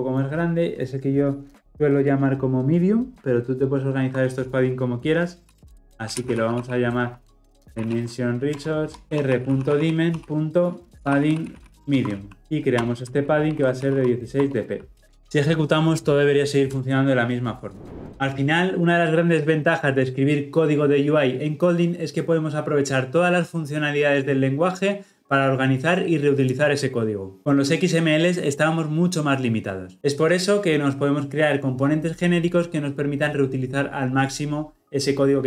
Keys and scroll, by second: 5.4 ctrl+x, 8.5 Return, 12.4 alt+Return, 15.2 shift+F10.